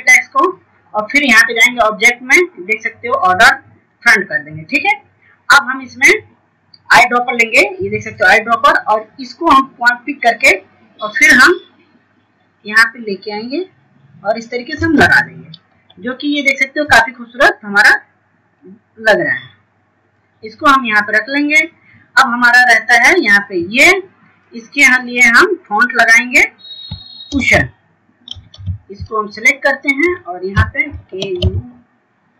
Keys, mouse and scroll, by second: 13.8 scroll up 1, 15.3 scroll down 1, 15.8-16.4 scroll up 1, 16.4 click, 17.2 scroll down 1, 18.7 F2, 19.5-23.4 drag, 24.0-24.5 scroll down 1, 24.5 click.